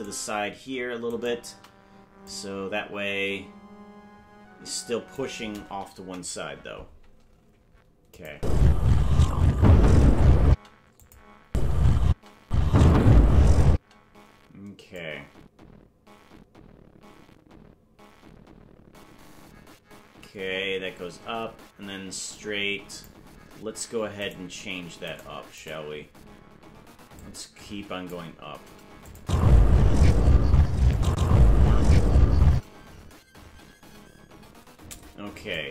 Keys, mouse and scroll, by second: 0.1 right click, 1.3 shift+right click, 2.2-5.2 drag, 5.9 KP_0, 8.1 click, 8.3 space, 11.0 click, 11.4 space, 12.4 space, 13.8 space, 14.9-23.1 drag, 24.5 right click, 25.1 right click, 25.6 right click, 27.1 click, 29.0-30.2 drag, 29.2 space, 31.0 click, 32.5 space, 35.5-35.7 drag.